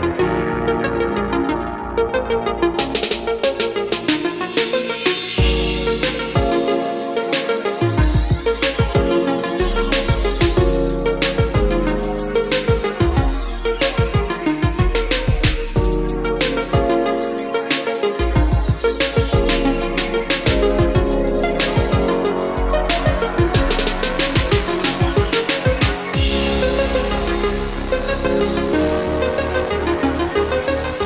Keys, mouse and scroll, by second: 1.6 click, 5.5 ctrl+c, 7.9 click, 11.5 ctrl+v, 13.0 scroll down 1, 14.7-15.1 scroll up 1, 17.3 click, 20.8 click, 22.0 KP_0, 23.8-24.8 drag, 25.2 KP_2, 25.9 KP_0, 27.7 click, 28.7 scroll down 1, 30.4 click.